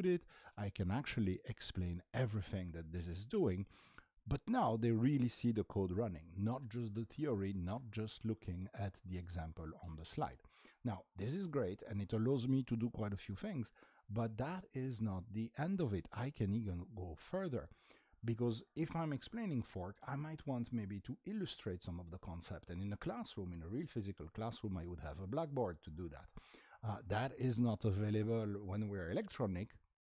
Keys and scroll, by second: 0.0-1.5 typing, 4.7 typing, 10.0 typing.